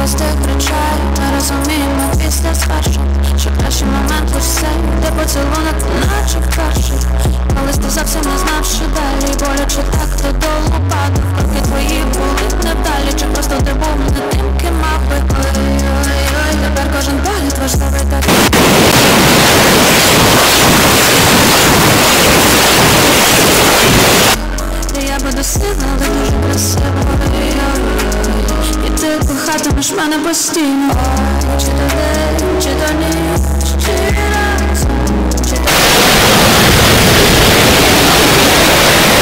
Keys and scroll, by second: 1.9 Down, 1.9 typing, 2.1 Return, 24.9 Page_Down.